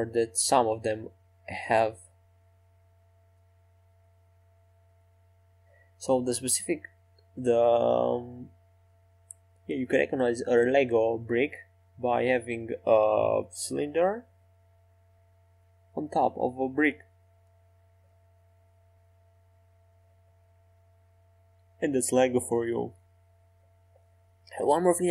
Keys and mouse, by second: 2.8-4.3 drag, 3.5 Tab, 4.1 middle click, 7.4 Tab, 9.9-13.3 right drag, 13.8 e, 15.2 s, 17.4 Tab, 18.9 click, 19.2 click, 19.6 click, 19.9 middle click, 20.3 click, 21.1 Tab, 24.4-25.1 shift+right drag.